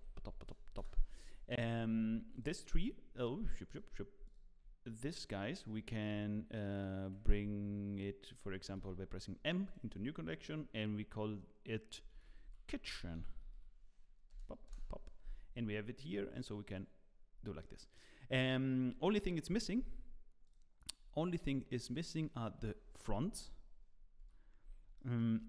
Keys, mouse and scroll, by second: 2.3 shift+click, 3.1 click, 4.2 shift+click, 5.4 shift+click, 16.3 click, 17.2 click, 17.2 middle click, 17.3 scroll down 2, 17.6 middle click, 18.3 click, 20.5 click, 21.0-21.8 scroll up 1, 21.8 click, 21.8 scroll up 1, 22.6 KP_1, 24.2 z, 24.6-24.9 scroll up 3, 24.9 shift+middle click.